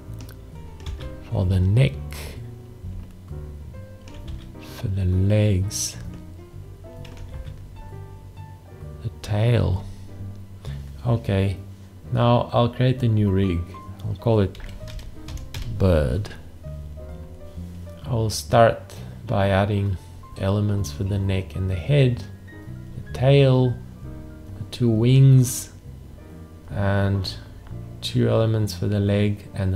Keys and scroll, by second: 0.8 alt+`, 4.2 alt+`, 7.3 alt+`, 14.4-16.1 typing.